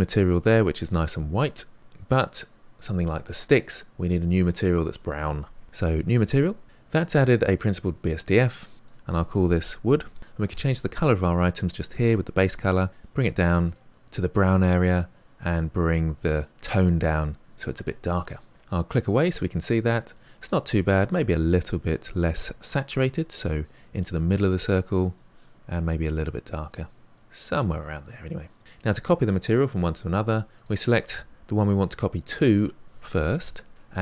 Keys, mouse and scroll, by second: 0.5 click, 1.4 click, 2.3 click, 6.1-9.4 drag, 9.4 o, 13.6 click, 18.5 click, 18.6-23.6 middle drag, 23.6 click, 30.6 click.